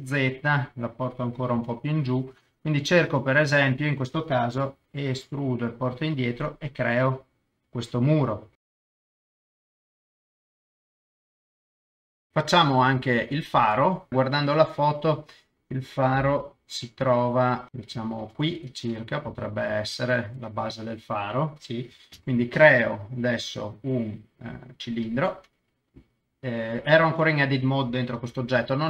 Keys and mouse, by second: 0.0 KP_0, 1.6 g, 1.7 middle click, 2.5 click, 2.9 KP_0, 4.8 e, 6.9 click, 7.3-8.6 middle drag, 8.6 shift+middle click, 8.8-11.4 typing, 8.8 Escape, 8.9 middle click, 9.3 middle click, 9.5 click, 10.0 click, 10.4 middle click, 10.5 click, 11.1 click, 11.3 Escape, 11.5 click, 11.6 click, 11.7 middle click, 11.9 middle click, 12.0 Tab, 12.1 Tab, 12.2 ctrl+s, 13.2 middle click, 14.1 KP_0, 17.0 KP_0, 17.7 7, 17.7 KP_7, 18.0 shift+right click, 18.9 middle click, 19.3 KP_0, 22.1 shift+a, 28.2 g, 28.3 middle click.